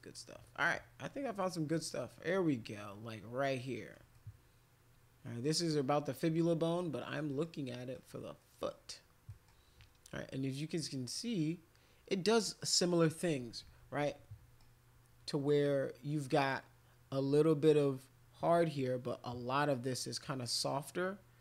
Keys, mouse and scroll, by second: 1.5 middle click, 2.1 middle click, 3.6 middle click, 4.1-5.4 middle drag, 6.8 middle click, 7.3 middle click, 7.8 middle click, 8.4 middle click, 9.3 middle click, 14.1 middle click.